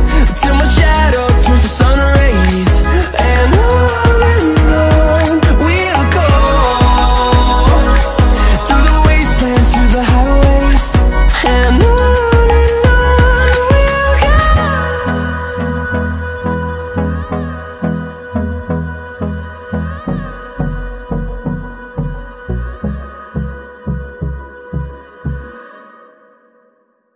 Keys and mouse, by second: 1.3 r, 4.7 r, 11.0-12.4 middle drag, 13.5 click, 14.5 Tab, 15.4-16.1 BackSpace, 16.5 BackSpace, 17.5 shift+l, 17.7 shift+e, 17.7 shift+w, 19.9 Tab, 20.8 click, 21.2 right click, 21.6 right click, 22.1 click, 23.6 click, 25.4 click, 26.6 click.